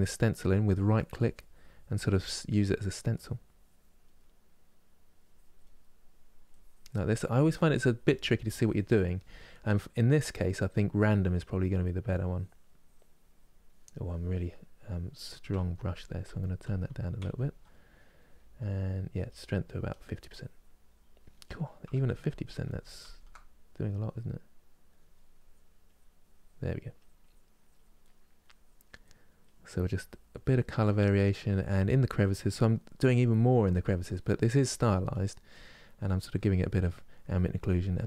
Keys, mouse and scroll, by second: 0.6-2.2 drag, 2.2 middle click, 2.8-3.9 drag, 3.9-4.9 middle drag, 4.9 click, 5.6 right click, 6.2-14.3 drag, 14.3-15.3 middle drag, 15.3 ctrl+z, 15.6 ctrl+z, 16.0 ctrl+z, 16.4 ctrl+z, 16.9 ctrl+z, 18.8-21.0 drag, 21.0 middle click, 21.7 ctrl+z, 22.0 ctrl+z, 22.4 ctrl+z, 22.7 ctrl+z, 23.7-26.4 drag, 26.5-27.7 drag, 27.7 middle click, 28.2 click, 28.7 middle click, 29.1-30.7 drag, 30.7 middle click, 31.2 click, 31.9 middle click, 32.3 click, 32.8 middle click, 33.2-34.4 drag, 34.4 middle click, 34.8 click, 35.2 middle click, 35.7 click, 36.6 middle click, 37.0 click, 37.7 middle click.